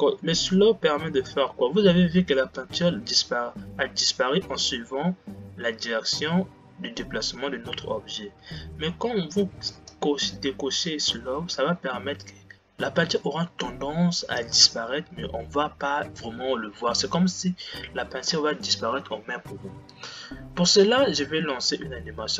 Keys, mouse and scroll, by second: 10.1 click.